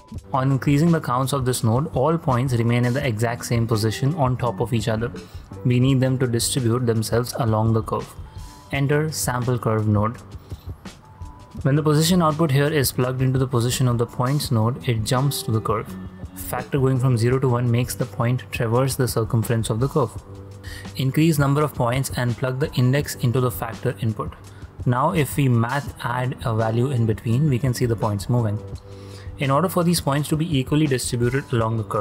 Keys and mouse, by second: 0.3-3.0 drag, 3.4-5.7 d, 6.4 ctrl+z, 9.9-12.5 drag, 13.3 shift+click, 13.9 ctrl+drag, 14.1 ctrl+middle click, 14.5 ctrl+middle drag, 15.0 shift+middle click, 15.5-16.0 shift+middle drag, 16.5-17.6 drag, 17.9-18.2 ctrl+drag, 18.4 shift+click, 19.3-20.5 drag, 20.7-22.2 drag, 22.2 shift+a, 23.1-23.7 drag, 24.8 ctrl+middle click, 25.1 shift+a, 25.9 click, 26.3 ctrl+middle click, 26.3 ctrl+click, 27.3-29.2 drag, 31.0 click, 31.3 shift+d, 31.9 click.